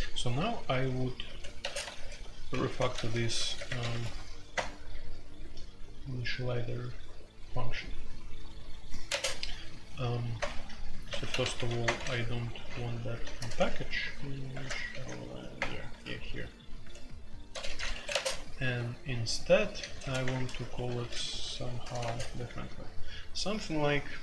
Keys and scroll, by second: 0.3-3.9 typing, 4.5 Return, 9.0 space, 10.3-11.8 typing, 12.9-15.5 typing, 17.5-18.6 typing, 19.7-22.0 typing, 24.0-24.2 typing.